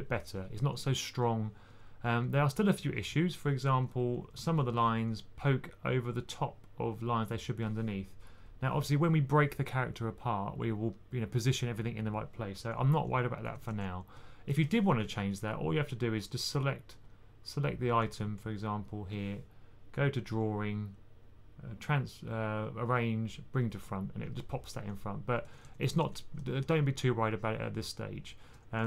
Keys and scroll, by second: 1.6-2.3 typing, 3.9-4.7 typing, 12.5-13.5 typing, 14.6-15.1 typing, 25.1-25.9 typing, 28.7-28.8 typing.